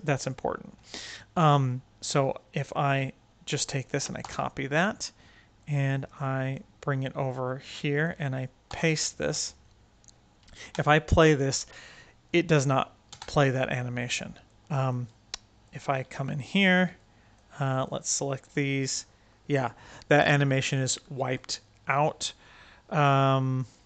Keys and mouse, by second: 4.1 ctrl+c, 5.6-6.4 drag, 7.4-8.1 right drag, 8.7 ctrl+v, 10.5 space, 13.1 space, 14.4-14.8 drag, 15.6 click, 15.8 Tab, 16.9 click, 20.6 click, 23.0 click.